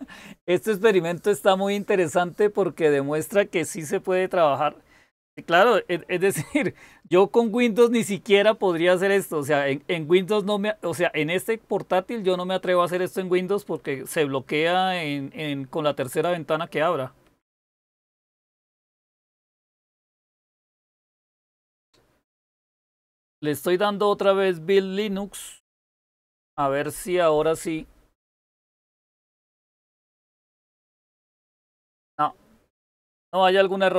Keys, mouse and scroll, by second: 8.9 Up, 13.7 Up, 17.3 Up, 17.9 Up, 19.7 Return.